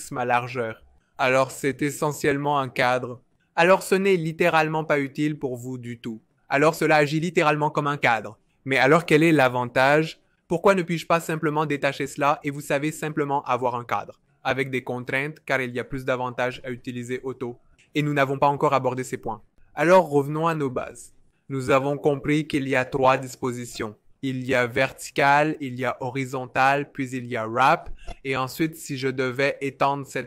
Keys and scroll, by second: 2.4 v, 21.2 BackSpace, 26.4 alt+super+b, 29.2 v.